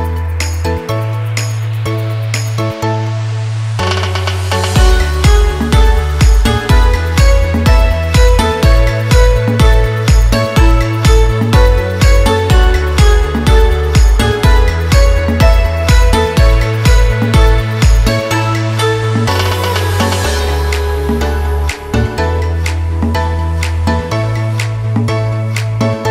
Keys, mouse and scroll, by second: 0.2 scroll down 1, 2.6-11.1 drag, 11.1 scroll up 1, 11.9 space, 12.0 click, 12.4 space, 12.8 scroll up 1, 13.3 space, 13.5 click, 13.9 space, 14.8 click, 15.8 Return, 16.3-22.2 drag, 22.2 ctrl+t, 22.8 click, 23.5 Return, 23.9-26.1 drag.